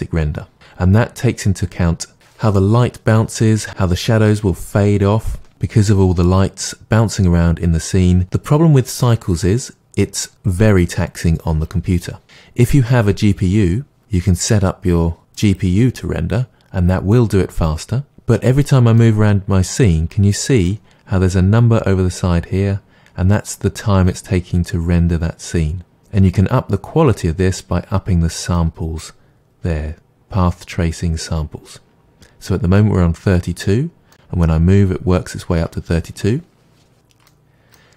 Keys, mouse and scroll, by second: 18.5-32.5 middle drag, 33.6-36.9 middle drag, 37.3-37.9 middle drag.